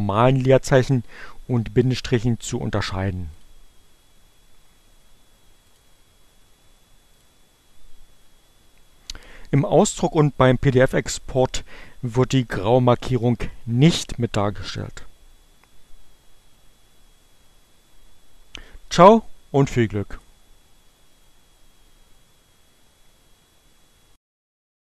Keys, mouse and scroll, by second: 1.2-3.2 drag, 4.4-5.6 drag, 6.4 click, 18.9 click, 19.2 Return, 24.4 click, 24.6 Return.